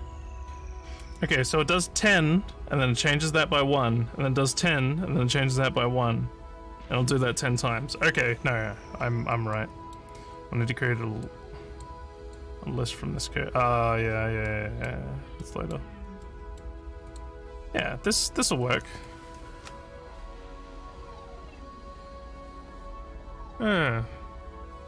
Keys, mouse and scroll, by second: 9.5 middle click, 11.2 click, 12.2 click, 14.4 middle click, 15.4 middle click, 16.2 middle click, 17.1 click, 18.0 click.